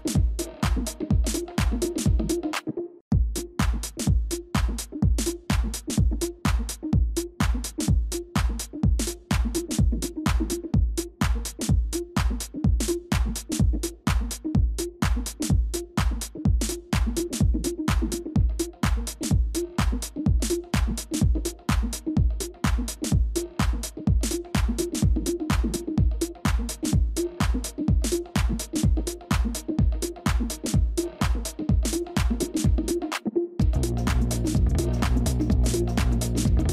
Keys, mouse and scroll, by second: 0.2-1.6 scroll up 1, 5.6 Delete, 19.6 double click, 23.8 double click.